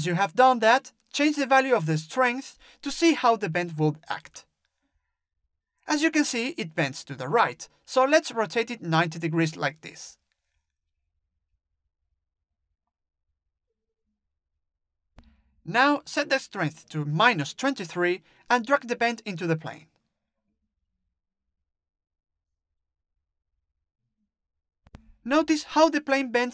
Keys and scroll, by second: 0.6 ctrl+z, 4.1 ctrl+z, 16.2-17.3 typing.